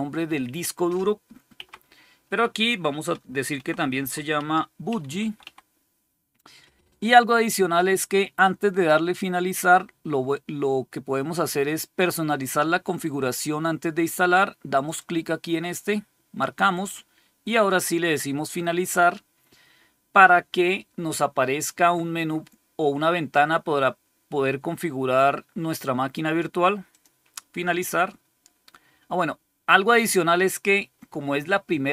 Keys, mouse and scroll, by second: 3.2-5.8 typing, 14.7 click, 26.8 click.